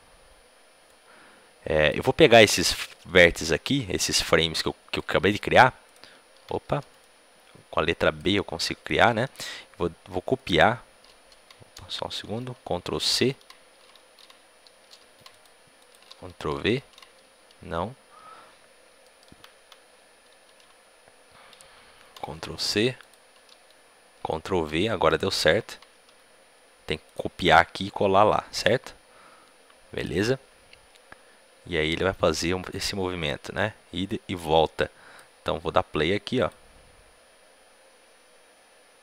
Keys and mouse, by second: 5.8-11.2 drag, 5.8 b, 11.2 ctrl+z, 11.2-15.2 right drag, 15.2-19.0 drag, 15.2 c, 16.0 ctrl+v, 16.7 ctrl+z, 19.2 a, 19.5 a, 23.0 ctrl+c, 23.0-26.0 drag, 23.4 ctrl+v, 26.0 g, 28.6 click, 28.6 g, 32.0-33.8 drag, 36.4-38.0 drag.